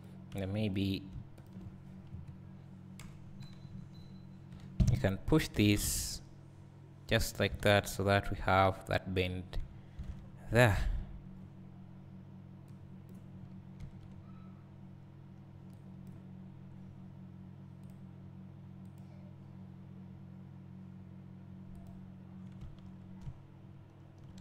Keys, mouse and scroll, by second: 1.7 ctrl+click, 2.2 KP_Decimal, 2.4 KP_Decimal, 3.0 KP_1, 3.7 KP_3, 5.8 g, 7.5 click, 8.0 scroll down 1, 9.3-11.0 scroll down 4, 11.0-11.8 scroll up 2, 11.8-12.7 scroll up 1, 12.7-22.7 drag, 13.4-14.0 scroll up 2, 23.3 `.